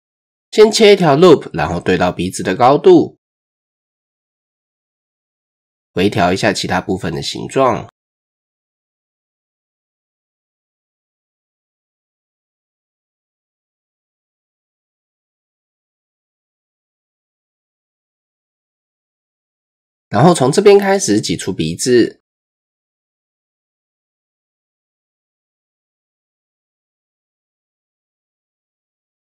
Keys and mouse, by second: 1.0 ctrl+r, 4.4 shift+click, 5.0 click, 6.7 g, 10.9 g, 15.3 shift+click, 15.6 Tab, 17.0 Tab, 19.0-19.5 shift+drag, 20.8 e, 23.2 r, 26.0 click, 26.7-27.1 drag, 27.7 click, 28.3 click.